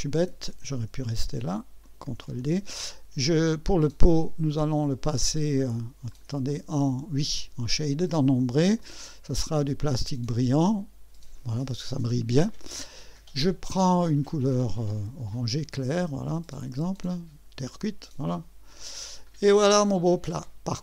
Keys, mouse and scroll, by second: 1.8 click, 2.2 ctrl+d, 4.8 click, 6.1 click, 6.8 click, 7.7 click, 8.8 click, 10.5 click, 12.7 click, 14.9 click, 17.6 click, 18.7 click, 19.2 click, 19.8-20.8 drag.